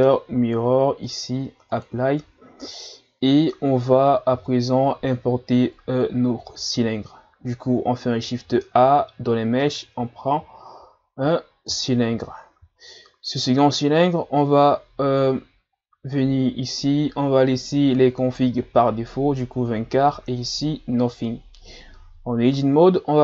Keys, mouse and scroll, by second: 1.1 click, 2.7-4.3 middle drag, 4.3 KP_1, 6.4 shift+a, 12.4-13.9 scroll down 2, 13.9 scroll up 1, 22.6 Tab.